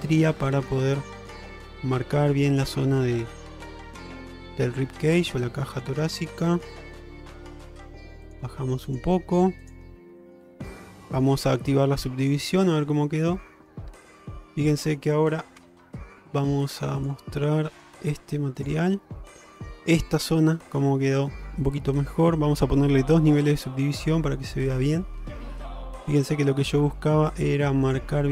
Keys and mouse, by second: 0.4 middle click, 1.2 click, 1.6 g, 2.9 middle click, 3.7 shift+middle click, 4.1-5.1 middle drag, 5.6 alt+middle click, 7.7 g, 9.2 g, 10.3 shift+middle click, 10.6 middle click, 11.0 middle click, 12.7-13.8 middle drag, 14.1 shift+middle click, 14.8 middle click, 15.7 Tab, 17.2-18.9 drag, 19.4 middle click, 19.8 shift+middle drag, 24.6 middle click.